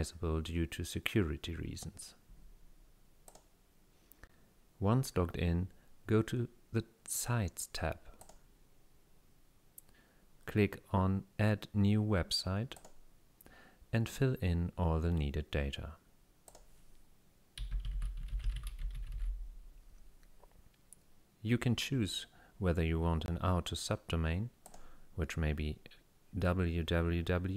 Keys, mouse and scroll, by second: 3.3 click, 8.2 click, 12.8 click, 16.5 click, 17.4-19.6 typing, 17.9 click, 19.1 click, 24.7 click.